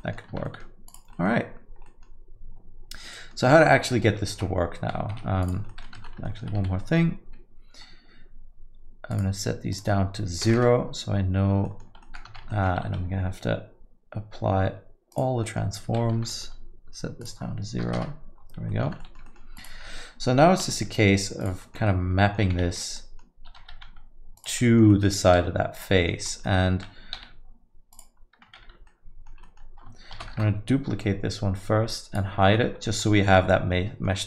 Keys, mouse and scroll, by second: 0.0 middle click, 0.3 Tab, 0.4 middle click, 0.9 click, 1.1 middle click, 1.8 middle click, 3.0 middle click, 4.3 r, 5.4 click, 5.7 alt+middle click, 5.8 alt+middle click, 6.0 Tab, 6.2 alt+middle click, 6.6 a, 6.8 middle click, 9.1 click, 9.7 click, 11.6 alt+middle click, 12.0 middle click, 12.3 Tab, 12.5 alt+middle click, 12.8 ctrl+a, 15.4 middle click, 16.1 Tab, 16.3 middle click, 17.2 click, 18.7 middle click, 18.9 Tab, 19.0 alt+middle click, 19.2 middle click, 19.5 click, 19.8 alt+middle click, 20.6 r, 21.6 middle click, 21.8 alt+middle click, 22.8 ctrl+z, 22.9 middle click, 23.6 r, 24.6 alt+middle click, 24.9 middle click, 25.2 s, 26.0 middle click, 26.2-26.5 scroll up 3, 26.4 middle click, 27.2 g, 28.8 ctrl+z, 28.9 alt+middle click, 29.4 middle click, 30.2 shift+d, 31.9 click, 32.4 alt+middle click, 32.9 alt+middle click, 33.2 alt+middle click.